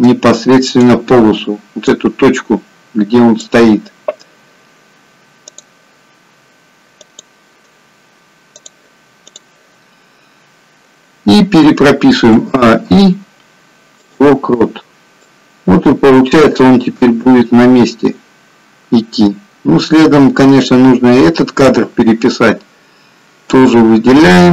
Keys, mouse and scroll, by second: 12.3 a, 12.6 i, 15.5 click, 23.5 click.